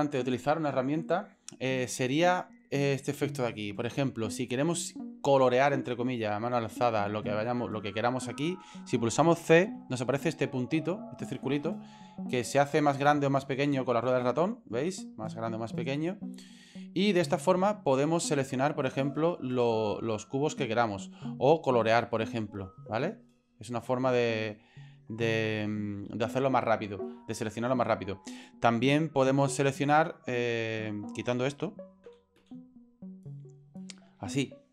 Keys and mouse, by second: 9.6 c, 33.8-34.7 drag.